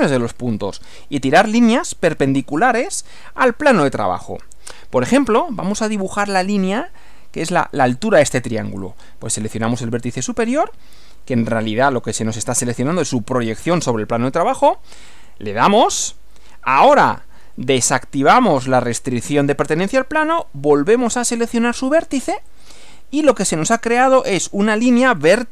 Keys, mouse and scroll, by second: 15.2 click, 18.7 click, 22.6 click, 24.2 click, 24.8 scroll down 1, 25.2-25.5 middle drag.